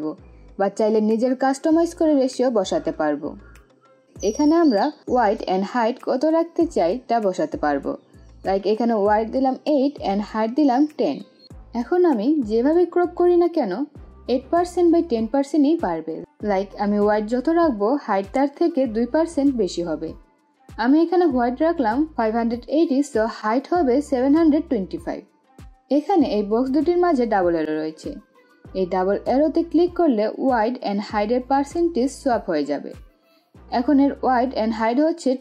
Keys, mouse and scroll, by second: 9.3 click, 10.9 click, 14.0-20.5 drag, 30.2 click, 32.8-35.4 drag.